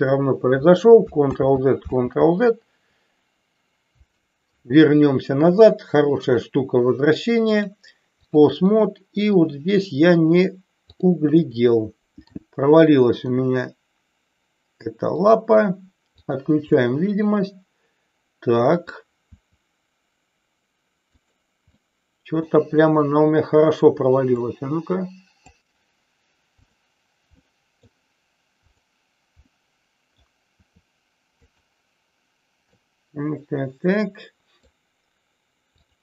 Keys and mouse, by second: 1.2 ctrl+z, 1.9 ctrl+z, 6.3 click, 7.4 click, 8.7-9.3 middle drag, 10.9 click, 11.5 middle click, 13.3 r, 16.8-18.9 middle drag, 19.3 r, 21.0 click, 21.7-22.5 middle drag, 24.3-25.4 drag, 26.5 click, 27.3 middle click, 28.7 click, 29.4 middle click, 30.4 r, 32.7-34.7 middle drag.